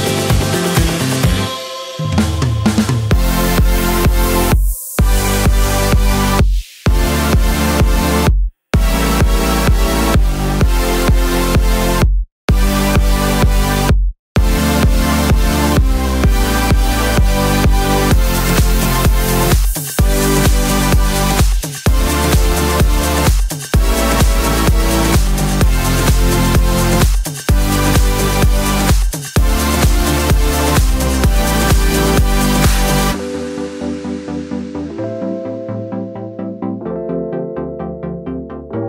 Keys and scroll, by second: 0.9 Left, 18.3 super+c, 18.4 super+v, 20.8-21.8 typing, 24.2-25.0 typing, 28.3-29.1 typing, 32.3 super+d, 34.5 super+z, 36.7 d.